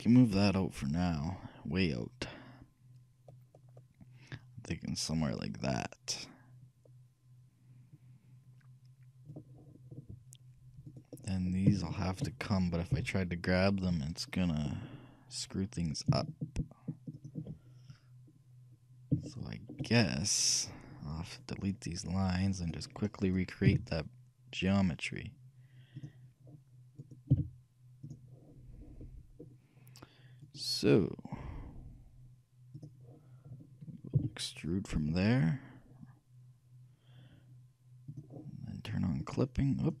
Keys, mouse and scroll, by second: 0.4-2.3 drag, 11.0-13.8 right drag, 13.0 shift+g, 19.2-21.4 shift+middle drag, 22.7-24.5 drag, 23.4-25.2 right drag, 23.7 x, 27.1-28.9 right drag, 27.4 x, 29.1-30.5 middle drag, 30.6-32.3 right drag, 32.8-34.7 drag, 34.3 e, 39.3-40.0 drag.